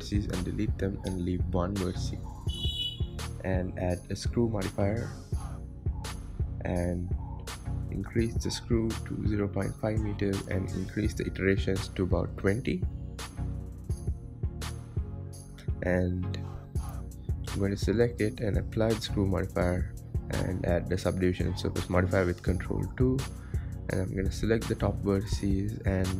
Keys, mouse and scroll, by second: 0.1 x, 0.7 Tab, 2.0 click, 2.6-5.6 drag, 7.2 KP_1, 7.8-8.3 scroll up 4, 8.3 shift+middle click, 8.6-9.0 scroll down 3, 9.5-13.4 drag, 13.4-13.8 scroll down 1, 13.8-16.4 shift+middle drag, 16.4 shift+a, 17.8 click, 18.2 click, 20.0 click, 20.8 click, 21.8 ctrl+2, 23.3 Tab, 23.8-24.2 scroll up 3, 24.2 shift+middle click, 24.8 click, 25.4-26.1 middle drag.